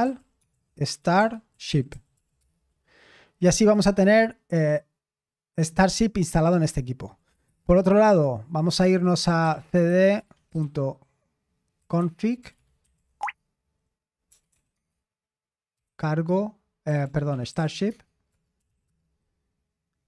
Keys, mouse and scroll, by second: 0.0-2.4 typing, 7.5 super+Return, 9.2-20.0 typing.